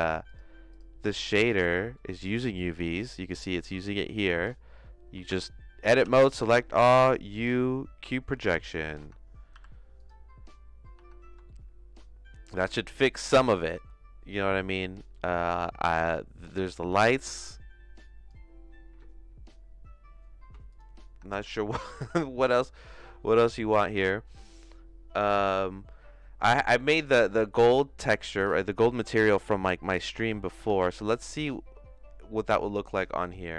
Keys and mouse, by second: 0.3 click, 0.7 click, 2.0 middle click, 3.1 middle click, 6.0 Tab, 6.0 a, 6.9 u, 8.3 Tab, 9.0 Tab, 9.5 u, 11.0 Tab, 11.4 shift+middle click, 12.7-13.7 shift+middle drag, 15.0 click, 16.0 middle click, 16.9-18.3 drag, 21.1 Tab, 21.4 a, 22.1 Tab, 28.3 middle click, 28.6 middle click, 29.5 middle click, 30.2 middle click, 30.7 ctrl+s, 31.2 middle click, 33.2 click.